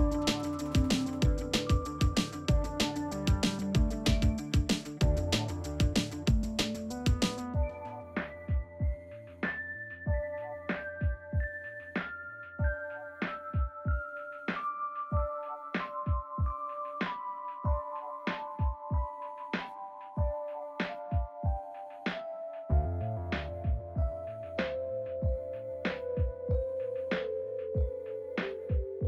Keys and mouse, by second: 0.1 g, 2.4 middle click, 3.4 click, 3.5 middle click, 3.9 g, 4.7 middle click, 6.5 shift+click, 7.2 g, 8.3 middle click, 11.4 ctrl+z, 11.7 middle click, 12.4 alt+z, 12.5 middle click, 12.8 middle click, 13.2 middle click, 13.6 click, 13.9 middle click, 14.4 KP_1, 15.3 ctrl+r, 18.8 alt+click, 20.4 g, 21.7 s, 22.4 Tab, 22.6 alt+z, 22.9-23.6 middle drag, 24.0-24.4 middle drag, 24.6 Tab, 24.8 middle click, 25.9 middle click, 26.5 middle click, 27.3 click, 27.8 shift+click, 28.2 shift+click, 28.4 middle click, 28.9 shift+click.